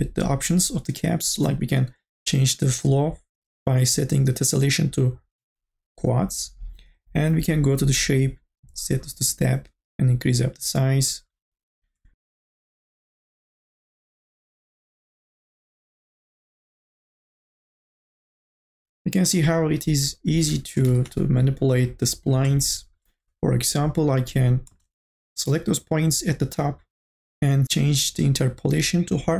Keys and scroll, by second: 20.7 n, 21.2 a, 24.1 1, 24.7 space.